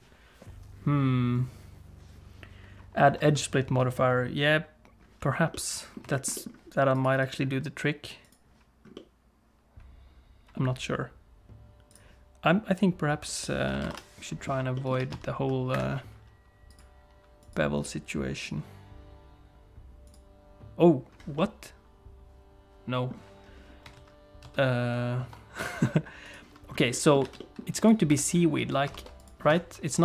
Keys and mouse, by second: 5.5 middle click, 6.1 shift+middle click, 6.3 middle click, 7.2-8.3 drag, 8.9-10.5 middle drag, 13.2-14.5 drag, 14.7 middle click, 14.9 r, 16.7 click, 17.4 click, 18.4 click, 20.0 click, 21.3-23.1 middle drag, 23.9 ctrl+z, 24.4 ctrl+z, 25.6 click, 26.2 click, 26.9 middle click, 27.2 alt+a, 27.4 middle click, 27.8 click, 28.1 Tab, 28.8 ctrl+r.